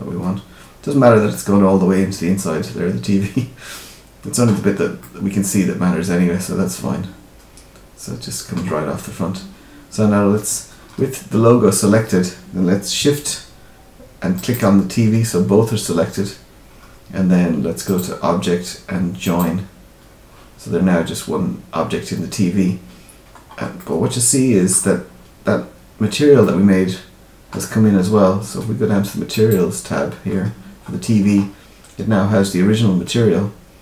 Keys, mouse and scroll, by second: 4.9 middle click, 8.6-9.4 scroll down 4, 14.3 shift+click, 17.8 click, 23.3-23.7 scroll up 4, 23.7 middle click, 26.3 middle click, 29.3 click, 30.2-32.2 scroll up 9, 32.2-33.0 scroll up 1.